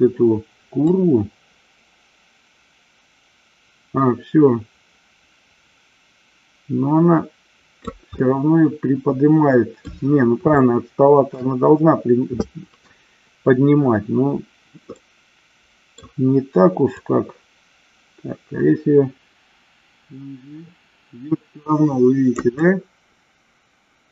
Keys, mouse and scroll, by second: 1.0-8.0 drag, 8.4-10.0 middle drag, 10.6-11.5 shift+middle drag, 15.0-16.1 middle drag, 17.1-22.5 drag, 22.8-24.1 middle drag.